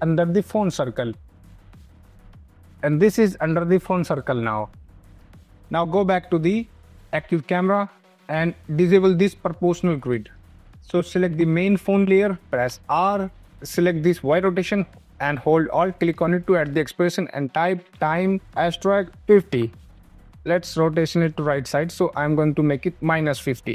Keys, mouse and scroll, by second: 2.6-3.8 scroll, 4.0 scroll, 5.1 click, 7.3 click, 10.7 click, 12.5 r, 13.4 click, 15.8 click, 17.1-19.8 typing, 20.3 click, 21.6 click.